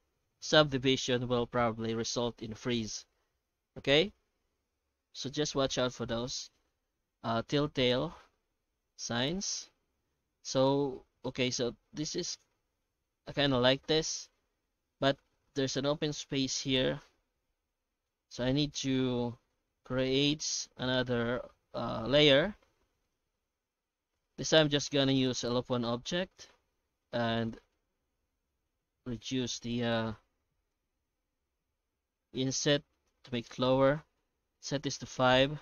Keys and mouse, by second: 7.9-10.0 middle drag, 12.8-13.7 middle drag, 15.0 middle click, 18.8-19.9 middle drag, 22.6 shift+q.